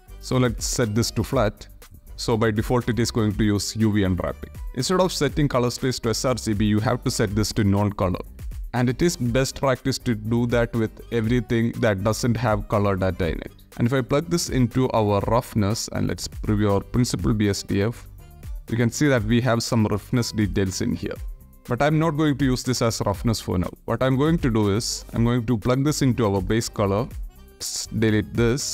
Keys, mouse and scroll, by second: 0.0 x, 1.0 click, 1.5 click, 2.4 click, 4.5 middle click, 5.4-7.1 drag, 8.0 middle click, 8.6-12.8 drag, 13.2 middle click, 13.6 ctrl+z, 13.6-14.9 drag, 15.1 middle click, 15.8 ctrl+shift+click, 18.0 shift+middle click, 23.2 click, 24.2 click, 24.7-25.8 drag, 26.3-27.1 ctrl+drag, 27.2-27.8 alt+shift+right drag, 27.8 ctrl+drag, 28.4 shift+a.